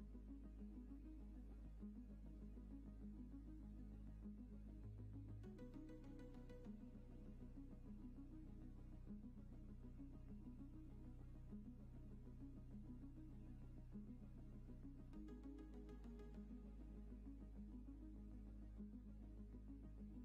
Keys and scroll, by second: 9.3 q, 11.2 shift+f, 16.1 w.